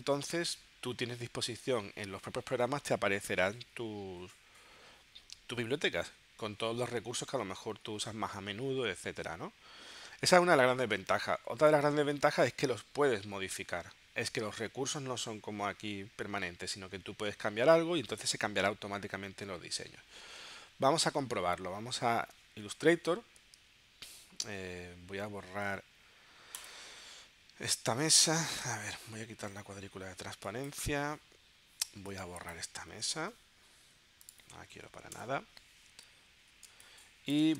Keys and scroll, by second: 33.3 BackSpace, 35.2 BackSpace, 36.7 space.